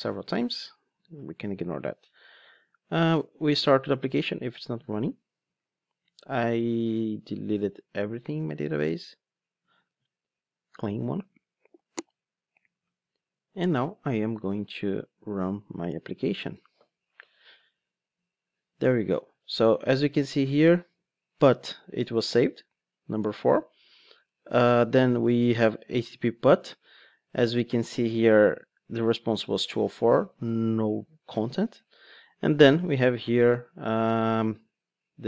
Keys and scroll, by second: 4.9 ctrl+d, 16.4 ctrl+shift+d.